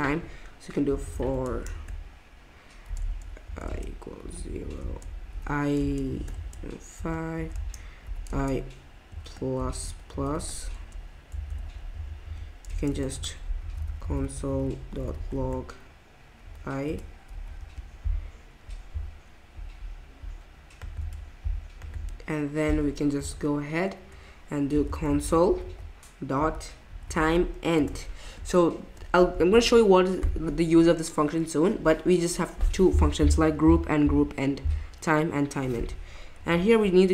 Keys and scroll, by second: 0.6-8.3 typing, 9.6-11.4 typing, 11.9 Right, 12.2 Right, 12.7-17.6 typing, 20.7 typing, 23.2 Return, 24.5-28.2 typing, 29.5 shift+9.